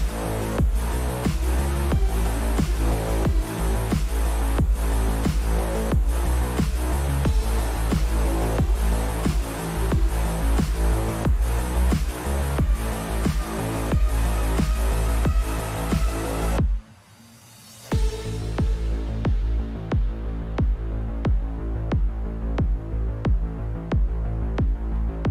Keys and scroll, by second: 11.7-14.4 typing, 20.4-22.7 typing.